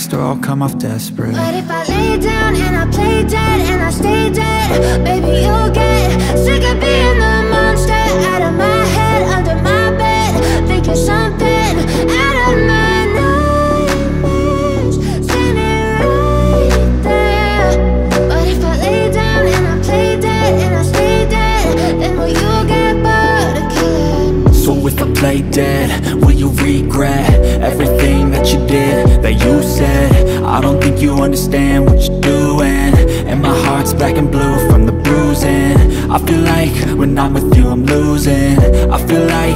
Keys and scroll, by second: 0.1 x, 2.8 7, 3.8 shift+d, 4.1 y, 5.2 0, 21.0 1, 21.1 0, 32.6-33.4 typing.